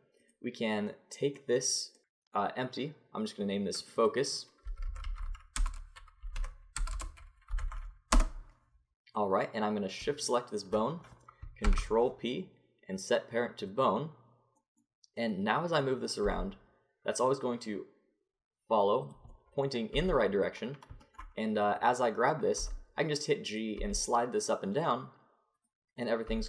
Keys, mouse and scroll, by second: 3.8-7.0 drag, 7.0 BackSpace, 10.2-11.7 drag, 11.7 ctrl+p, 11.9-14.4 drag, 15.2 click, 16.2 g, 19.9 g, 21.6 middle click, 22.6 g, 23.8 g, 26.0-26.4 right drag, 26.3 g.